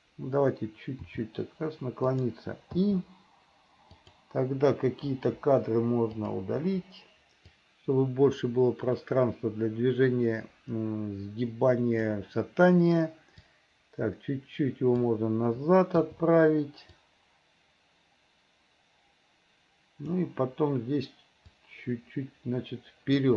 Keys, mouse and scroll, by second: 1.1 r, 2.8 i, 4.0 click, 5.2 Delete, 6.2 click, 6.7 Delete, 7.6-12.2 drag, 13.7-15.1 drag, 17.0-20.3 drag, 21.6-23.3 drag.